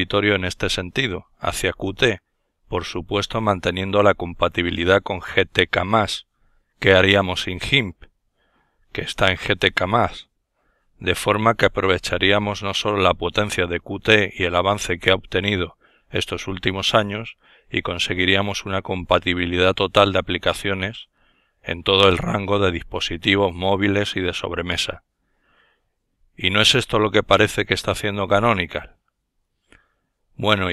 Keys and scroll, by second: 4.3-5.9 typing, 7.3 Return, 20.6 alt+F4, 28.9 super+F10.